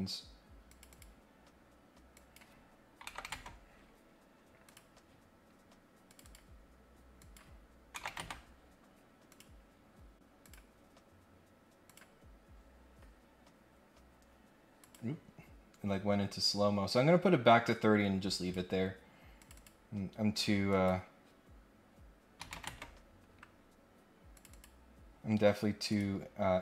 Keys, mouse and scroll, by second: 0.6 click, 0.9 click, 2.1 click, 4.6 click, 5.5 scroll up 1, 6.0 click, 6.2 click, 7.2 click, 9.3 click, 10.4 click, 11.8 click, 14.7 click, 15.4-15.8 scroll up 1, 17.6 click, 19.3 click, 19.5 click, 20.7 click, 24.3 click, 24.5 click, 25.9 click.